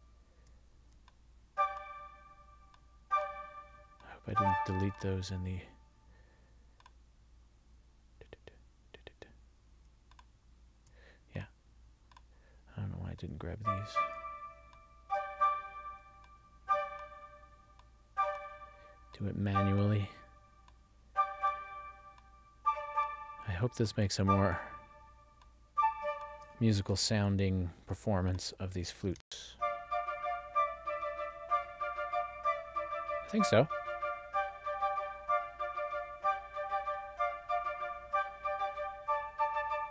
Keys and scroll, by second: 29.3 space.